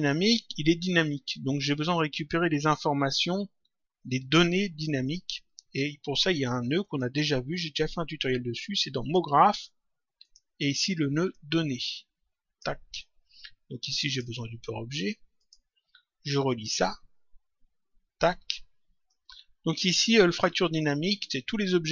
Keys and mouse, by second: 6.8 click, 8.9 click, 10.1 click, 13.9 click, 15.3 click, 16.7 click, 19.0 click.